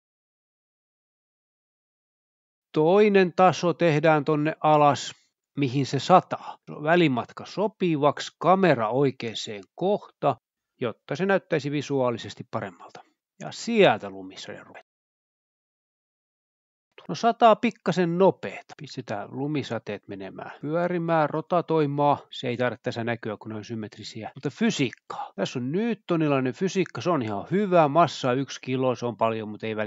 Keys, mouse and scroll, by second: 0.2 space, 0.6 space, 2.8 click, 3.1 a, 3.6-4.0 scroll up 1, 4.0 space, 4.3 space, 4.6 s, 5.0 click, 5.9 click, 6.6-7.9 typing, 7.3 click, 9.3 g, 9.9 Escape, 9.9 z, 10.3 drag, 10.8 scroll down 1, 11.0-11.3 scroll up 1, 11.5 middle click, 11.8 click, 12.2 g, 12.3 z, 13.0 click, 13.5 0, 13.8 r, 16.6 click, 16.8 space, 17.6-23.9 space, 18.9 click, 19.9-20.6 scroll down 1, 21.6-22.2 scroll down 1, 23.0-23.6 drag, 23.9-24.5 drag, 24.3 scroll down 1, 25.6-26.5 scroll down 2, 28.4-29.0 drag, 29.2-29.7 scroll down 2.